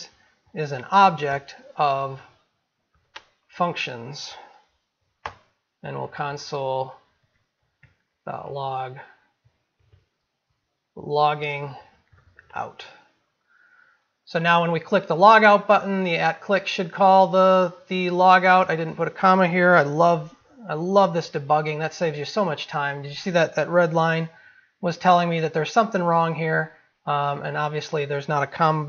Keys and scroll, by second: 24.4 ctrl+z.